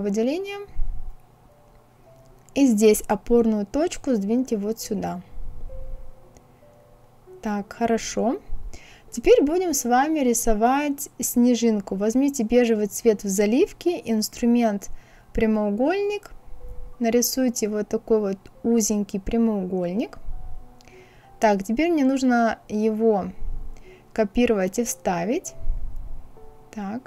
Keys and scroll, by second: 23.2 ctrl+c, 23.6 ctrl+v.